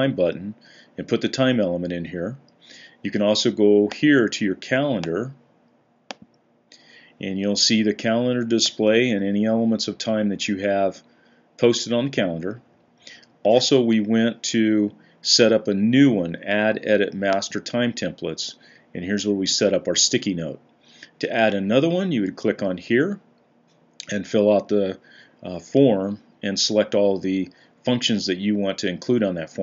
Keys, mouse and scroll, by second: 8.7 Down, 9.3 Down, 9.4 Down, 9.9 Down, 10.1 Down, 10.3 Down, 10.5 Down, 10.6-12.7 Down, 11.7 Up, 11.9-12.7 Up, 13.2 Up.